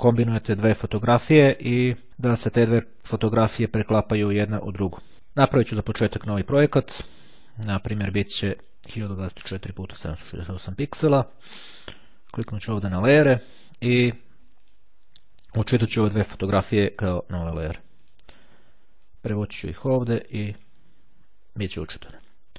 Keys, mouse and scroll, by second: 5.7 click, 6.7 click, 7.9 click, 8.7 click, 9.9 click, 12.5 click, 14.7 click, 15.6 click, 16.8-18.7 ctrl+drag, 19.1-21.2 drag.